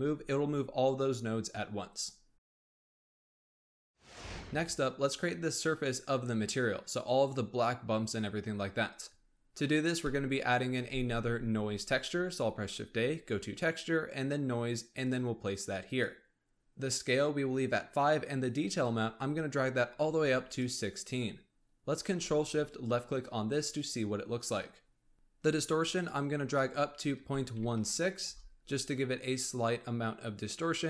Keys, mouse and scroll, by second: 2.4 click, 9.2-10.0 scroll up 1, 10.0-10.7 middle drag, 10.7 shift+a, 16.6-18.5 scroll up 4, 18.6-20.6 drag, 22.6 ctrl+shift+click, 25.2-25.9 scroll up 2, 25.9-29.4 drag.